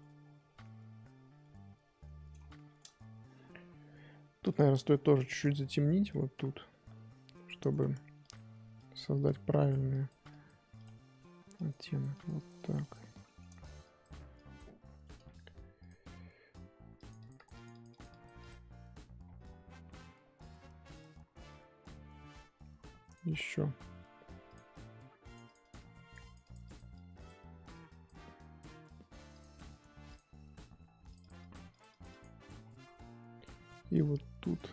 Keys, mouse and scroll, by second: 0.1 scroll up 1, 0.2 scroll down 4, 0.3 middle click, 0.7-1.4 scroll up 4, 1.4-4.5 middle drag, 4.5 click, 4.9 scroll up 3, 5.2 shift+middle click, 6.0-7.7 drag, 7.7 ctrl+z, 8.2-13.2 drag, 13.2 shift+middle click, 13.8-15.8 drag, 16.9-19.2 drag, 19.2-20.0 scroll down 11, 20.0-20.5 scroll up 6, 21.6-23.1 scroll up 5, 23.1 click, 24.5 click, 25.2-29.4 drag, 30.1 click, 31.1-32.6 drag, 32.6-33.0 scroll down 2, 33.0-34.5 scroll up 2, 34.5 click.